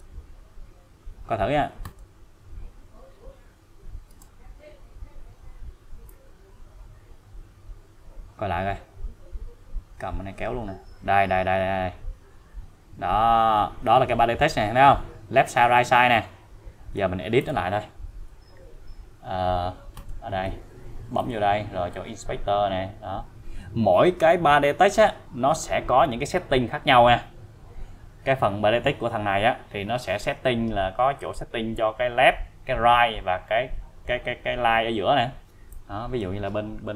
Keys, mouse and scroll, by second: 1.8 click, 4.1 space, 6.1-17.0 click, 20.0 right click, 20.1 click, 21.2 click, 35.7-36.3 click.